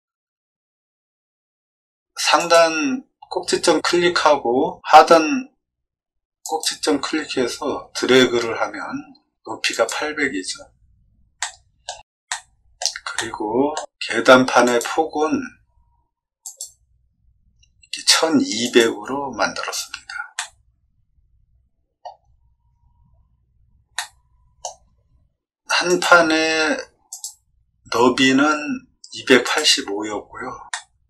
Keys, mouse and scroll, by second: 2.3 click, 6.4 click, 9.7 click, 11.3 shift+middle click, 12.2 middle click, 13.1 shift+middle click, 14.6 click, 16.4 click, 18.6 click, 20.3-21.9 middle drag, 22.1 scroll down 2, 23.9 middle click, 25.8 click, 27.0 click, 29.4 click, 30.6-31.0 middle drag.